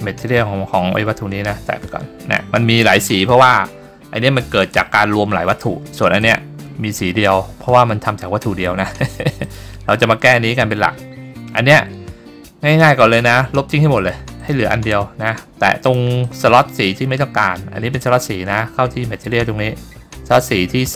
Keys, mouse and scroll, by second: 0.7 click, 3.0-3.3 scroll down 2, 3.3-3.9 scroll up 3, 6.3 click, 9.5 click, 13.1 click, 14.5 click, 16.0-18.3 drag.